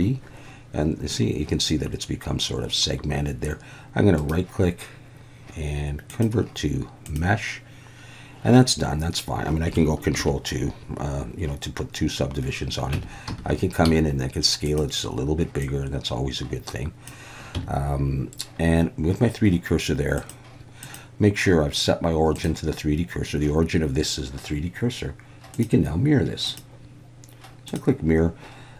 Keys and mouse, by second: 4.3-7.1 right drag, 7.1-7.5 drag, 10.2 ctrl+2, 12.9 Tab, 13.3 a, 13.8 s, 14.6 click, 15.7-17.1 drag, 17.6 Tab, 20.2-23.5 drag, 26.5-27.8 drag.